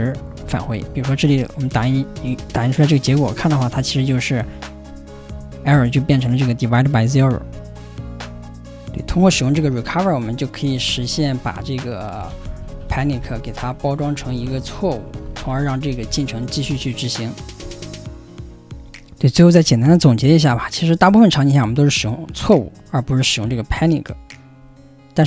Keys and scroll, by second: 0.4 ,.